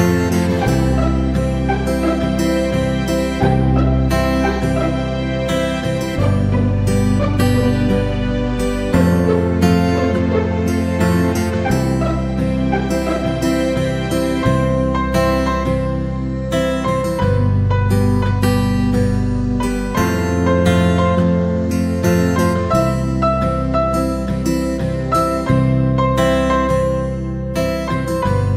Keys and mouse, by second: 1.3 x, 3.8 ctrl+z, 6.4-6.7 drag, 12.5 alt+z, 13.0 KP_3, 13.5 KP_1, 14.5 alt+right click, 15.1 g, 18.8 a, 21.4 w, 25.6 KP_3, 26.1 KP_1, 27.3 s.